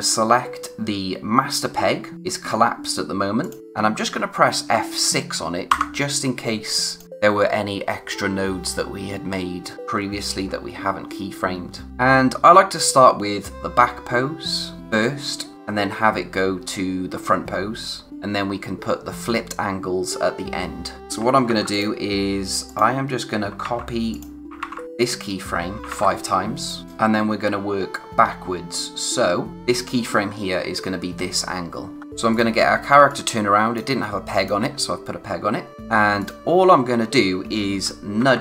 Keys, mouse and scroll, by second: 3.4 click, 5.7 F6, 6.8 click, 21.0 click, 21.4 ctrl+c, 21.7 click, 24.1 click, 26.6 click, 29.5 click, 31.6-32.0 scroll down 1, 32.0 scroll up 1, 32.0 p, 32.3 click.